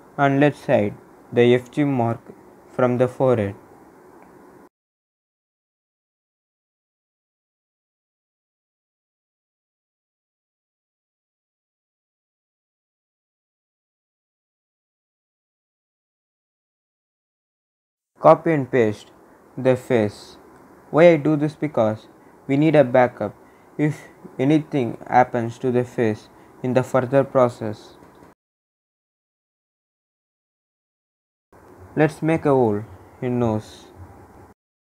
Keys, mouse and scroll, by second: 12.9 scroll down 1, 14.1-17.4 drag, 19.5 ctrl+c, 21.5 click, 24.9 click, 32.7 scroll up 1, 34.2-34.9 drag.